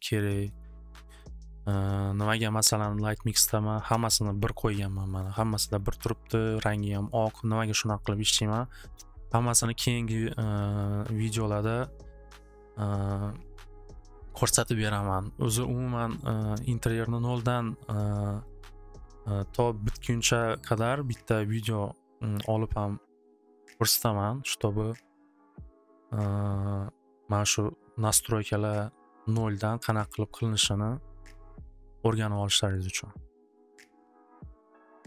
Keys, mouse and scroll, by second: 0.1 click, 0.5 click, 0.8 click, 1.2 click, 1.4 click, 1.6 click, 3.9 click, 4.6 click, 5.2 click, 5.7 click, 6.2 click, 8.3 click, 8.6 click, 9.0 click, 9.4 click, 9.8 click, 10.0 click, 10.4 click, 10.8 click, 13.9 click, 18.0 click, 18.5 click, 21.8 middle click, 22.5 middle click, 22.6 click, 23.3 click.